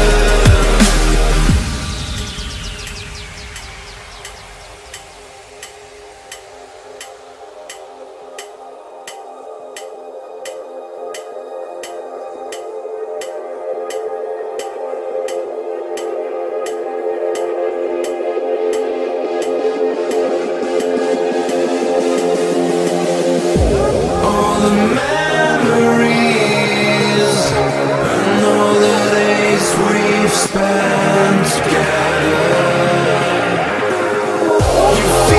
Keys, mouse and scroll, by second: 0.0-0.4 typing, 0.9 click, 2.5-5.1 typing, 6.7 click, 9.8 F11, 9.9 F10, 11.3-15.2 drag, 18.9 click, 19.6 right click, 21.1-22.5 drag, 23.6 ctrl+c, 24.4 click, 30.1 right click, 30.4 scroll down 1, 31.0 right click, 32.3 scroll up 1, 32.7 click, 33.1 ctrl+v, 34.2-34.6 scroll up 1, 34.8 click, 35.0 F10.